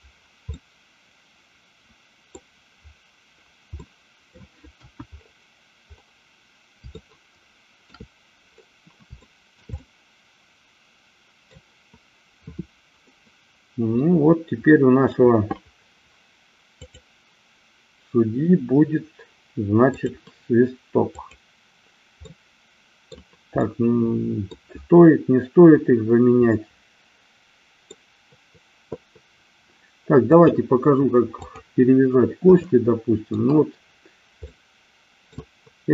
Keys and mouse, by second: 0.7-2.4 middle drag, 3.9 middle click, 4.8 KP_1, 6.9-7.9 shift+middle drag, 9.2-9.7 shift+middle drag, 9.8-11.4 middle drag, 13.0-15.3 middle drag, 16.8-18.8 drag, 19.9 click, 21.2 click, 22.3 middle click, 23.7 middle click, 26.5-27.9 middle drag, 30.3-31.8 drag, 32.7 shift+middle click, 34.4-35.4 middle drag.